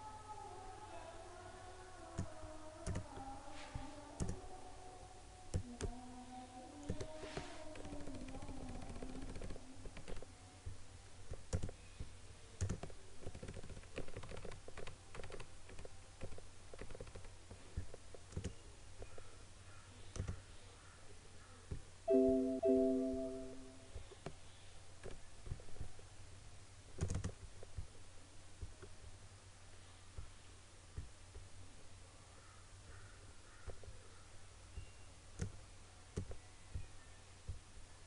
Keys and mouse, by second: 8.0 Up, 9.9 Left, 11.6 click, 13.3 Up, 14.0 Left, 15.8 Up, 16.9 Left, 18.4 click, 25.1 Up, 27.1 click, 33.8-38.0 drag.